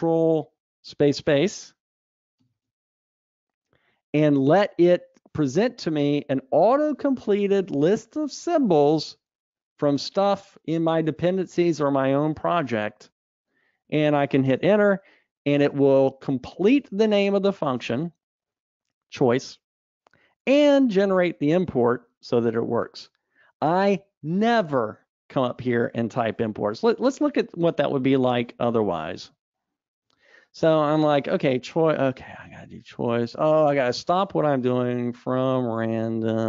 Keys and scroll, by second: 2.6 ctrl+space, 15.1 Return, 27.5 super+z, 28.0 super+z, 29.1 super+z.